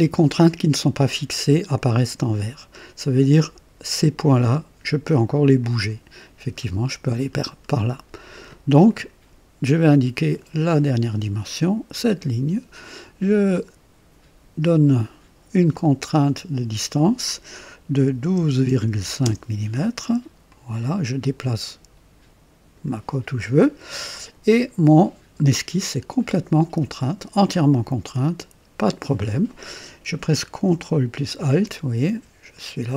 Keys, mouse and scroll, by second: 5.6-8.6 drag, 8.9 click, 10.7 click, 15.7 click, 18.1 KP_1, 18.4 KP_2, 18.7 KP_Decimal, 18.9 KP_5, 19.2 KP_Enter, 20.5-23.0 drag, 31.7-32.9 ctrl+alt+drag.